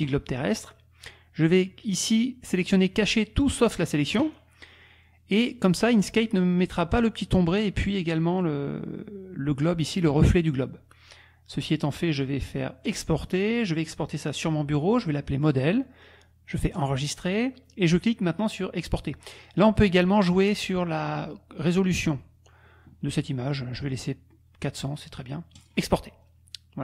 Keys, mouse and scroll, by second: 1.5-3.2 drag, 12.9 click, 14.4 click, 15.4 click, 16.8 click, 19.4 click, 19.9 click, 25.6 click.